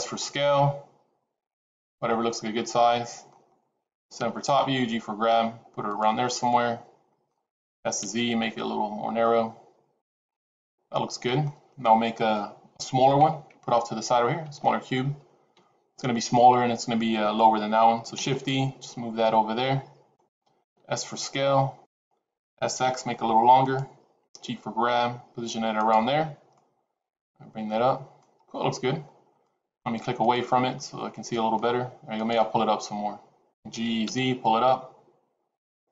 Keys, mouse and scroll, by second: 2.0 middle click, 4.1 KP_7, 4.7 g, 6.2 middle click, 7.7 s, 10.2 middle click, 15.4 KP_7, 18.5 shift+d, 20.6 s, 22.5 s, 24.2 g, 26.5 middle click, 28.2-29.0 scroll up 2, 29.0-29.4 scroll down 3, 29.4 shift+middle click, 30.1 click, 30.8 middle click, 32.1 click, 33.4 g.